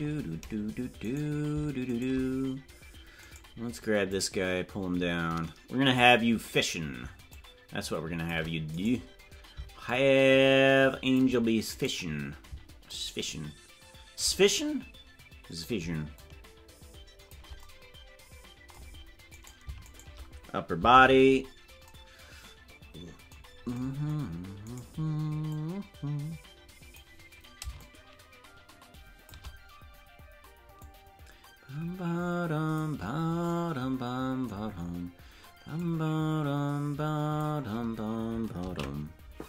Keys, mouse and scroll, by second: 2.0 shift+right click, 3.3 right click, 4.0-6.0 drag, 7.3-8.3 shift+drag, 8.8 right click, 9.8-11.2 shift+drag, 11.8 right click, 12.8-14.2 shift+drag, 14.4-15.6 drag, 16.1-17.3 shift+drag, 19.9 shift+right click, 20.9 alt+r, 24.7-25.5 right drag, 25.5-27.0 drag, 27.7-29.3 shift+drag, 30.7-32.8 drag, 35.7-37.4 drag.